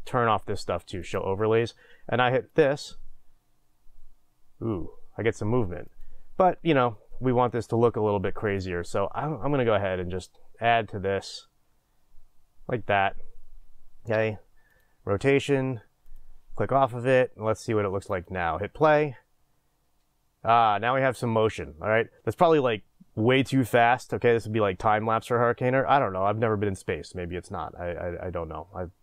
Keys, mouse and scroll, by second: 1.0 click, 2.6 click, 6.5-8.6 drag, 10.3-16.1 drag, 18.3 drag, 18.9 click.